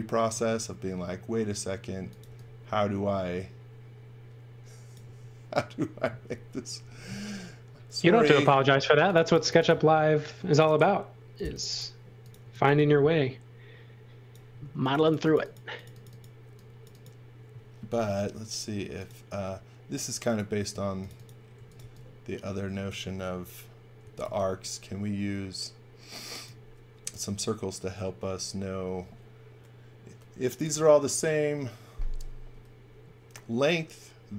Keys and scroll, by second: 0.3 space, 2.0 x, 2.2 v, 5.0 space, 12.1-13.1 typing, 14.4 space, 17.9 i, 20.7-22.2 typing, 23.7-24.7 typing.